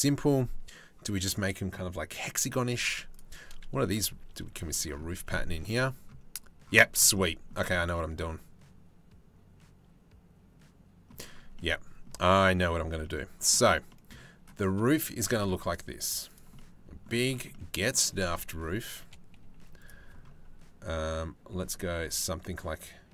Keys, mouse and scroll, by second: 2.7 click, 3.5 KP_Decimal, 3.8 shift+middle click, 4.7 shift+middle click, 6.8 middle click, 7.5-10.8 middle drag, 11.1 middle click, 11.9 middle click, 12.6 middle click, 13.6 click, 14.9 shift+a, 16.2 click, 18.2 KP_3, 19.0 z, 21.1 g.